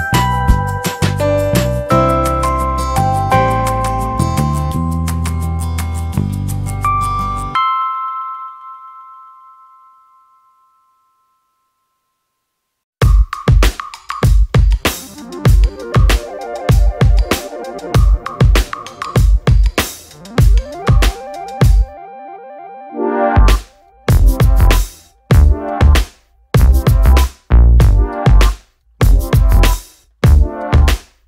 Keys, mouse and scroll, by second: 1.6 middle click, 1.9 alt+middle click, 4.0 scroll up 1, 4.8 scroll up 1, 5.8 middle click, 7.0 middle click, 7.3 scroll down 1, 8.0 middle click, 11.0 middle click, 12.8 click, 17.0 click, 19.5 click, 20.9 click, 21.0 click, 23.1 alt+middle click, 24.5 click, 26.7 click, 28.7 click, 30.9 click.